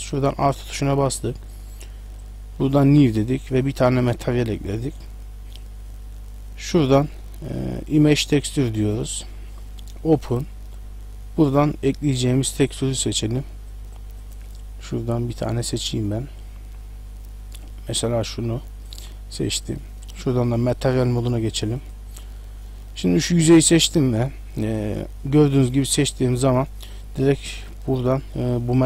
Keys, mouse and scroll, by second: 0.1 click, 2.2 click, 6.7 click, 10.2 click, 18.0 click, 18.0 scroll down 8, 20.5 click, 20.9 click, 22.6 middle click, 23.2 right click.